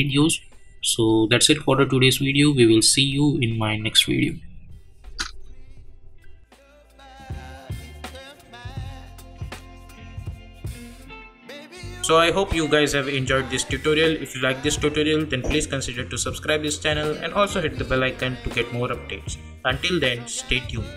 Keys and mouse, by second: 5.0 space.